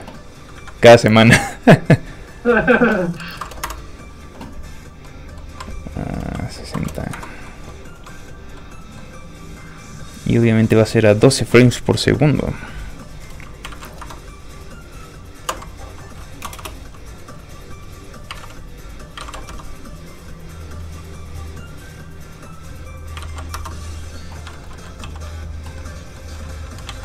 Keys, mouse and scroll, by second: 0.2-0.7 scroll down 2, 1.9-2.5 scroll up 1, 2.5 click, 3.3 KP_6, 3.4 KP_0, 3.6 Return, 5.0 middle click, 6.4 click, 6.6 KP_6, 6.7 KP_0, 7.4 Return, 7.4 middle click, 7.7-8.5 scroll down 1, 8.5 middle click, 9.0 scroll down 1, 10.6 middle click, 12.1 click, 13.6 KP_1, 13.7 KP_2, 14.0 Return, 14.6 click, 15.4 KP_3, 16.4 BackSpace, 18.0 click, 18.3 KP_2, 19.1 KP_1, 19.2 KP_2, 19.4 Return, 19.7 click, 23.1 KP_1, 23.2 KP_2, 24.4 Return, 24.5 shift+middle click, 24.7 middle click, 25.0 shift+z, 25.7 middle click, 26.2 scroll up 1, 26.3 middle click, 26.8 alt+shift+z.